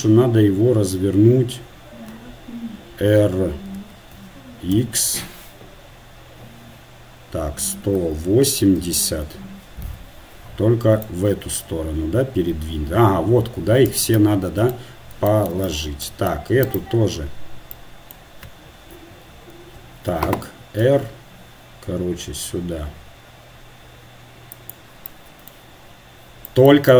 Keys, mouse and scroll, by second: 3.8 r, 11.1-13.3 drag, 14.5-15.7 middle drag, 15.7 Tab, 16.7-17.9 right drag, 17.9-19.0 drag, 19.0 KP_3, 20.9 r, 25.1-26.9 middle drag.